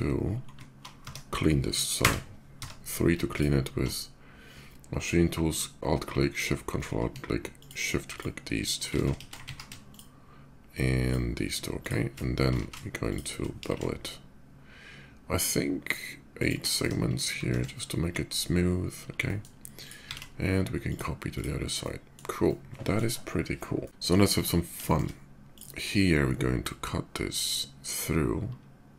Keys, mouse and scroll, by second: 0.8 Tab, 1.6 3, 2.3 Tab, 3.1 ctrl+alt+Tab, 3.1 click, 4.1 ctrl+alt+Tab, 6.1 ctrl+alt+shift+click, 7.3 shift+click, 7.9 shift+click, 9.0 ctrl+shift+z, 9.5 shift+click, 10.8 shift+click, 11.6 shift+click, 12.6 ctrl+shift+z, 12.9 shift+click, 13.2 ctrl+b, 14.8-16.2 middle drag, 16.2 shift+click, 16.6 Tab, 17.1 shift+Tab, 17.4 shift+2, 17.7 middle click, 18.0 /, 18.9 middle drag, 19.5 click, 20.6 alt+x, 20.6 click, 21.1 click, 21.4 scroll up 1, 21.5-21.9 middle drag, 22.1-22.7 middle drag, 23.2-23.8 middle drag, 23.8 d, 24.0 click, 24.6 shift+middle click, 25.2 click, 26.2-28.9 drag.